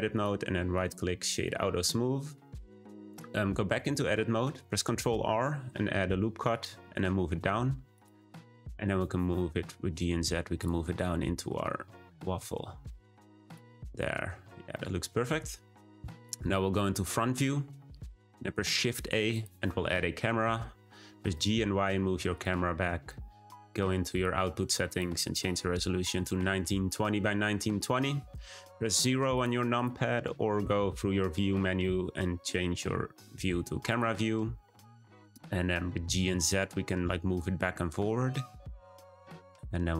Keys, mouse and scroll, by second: 0.1-1.4 right drag, 1.4-3.7 middle drag, 3.7 Tab, 5.1 r, 8.1 Tab, 8.6 g, 10.9-12.3 middle drag, 12.3 g, 13.4 drag, 13.7 scroll down 1, 13.9-14.3 middle drag, 14.3-14.7 scroll down 1, 14.7-16.4 middle drag, 16.4 `, 18.3 shift+a, 19.9-20.6 middle drag, 20.6-21.0 scroll down 3, 21.0 g, 24.1 click, 24.8-27.9 drag, 29.3 click, 29.7 click, 34.9-36.0 scroll down 2, 36.0 g.